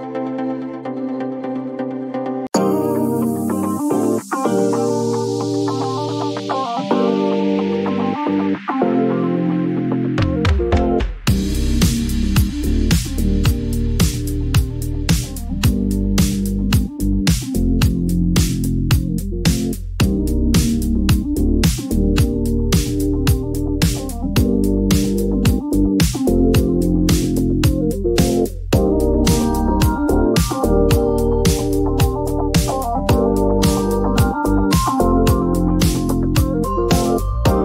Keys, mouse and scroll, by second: 3.4 click, 4.9 click, 7.8 click, 10.7 right click, 12.4 click, 13.9 click, 15.8 click, 19.9 click, 23.9 click, 28.1 click, 29.3 click, 31.7 click, 32.8 click, 34.9 p, 36.9 typing.